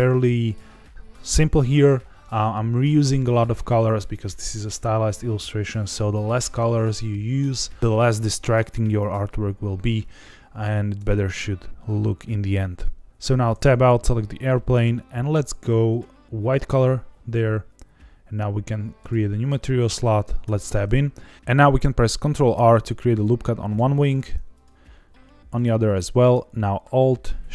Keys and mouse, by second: 10.9 Tab, 13.2 Tab, 13.7 click, 14.2 middle click, 15.8 click, 20.4 Tab, 22.5 ctrl+r, 24.1 ctrl+r, 25.5 right click.